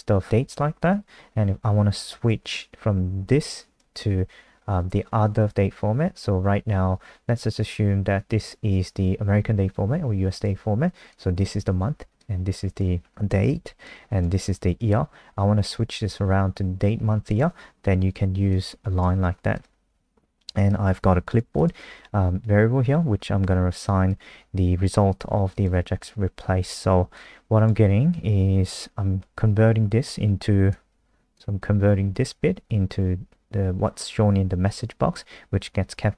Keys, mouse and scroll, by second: 25.7 F5.